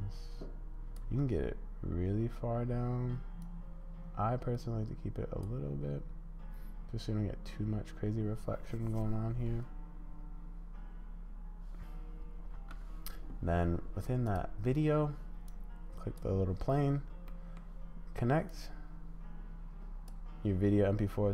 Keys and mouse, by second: 1.0 space, 2.7 space, 3.4-5.4 drag, 5.7 space, 12.5 space, 14.3 click, 15.4 click, 17.4 click, 18.6-20.1 drag.